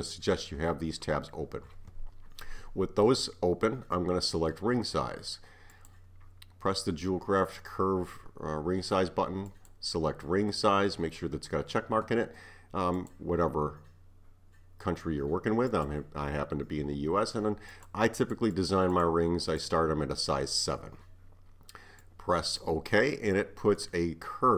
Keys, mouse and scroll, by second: 5.7-8.8 drag, 18.6-21.6 drag, 23.4-24.1 middle drag, 24.1-24.5 scroll up 3.